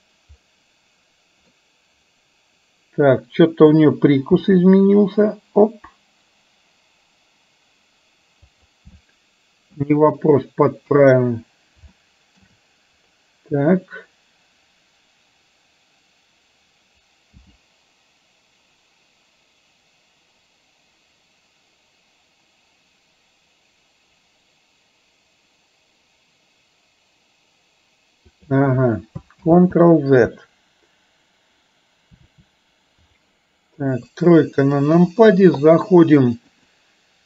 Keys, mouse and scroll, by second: 1.5-3.8 middle drag, 4.5 g, 9.0 middle click, 9.8 scroll down 1, 10.9 KP_1, 12.0 shift+scroll up 1, 12.2 shift+middle drag, 17.5 g, 29.7 ctrl+z, 33.9 KP_3, 36.8-37.2 drag.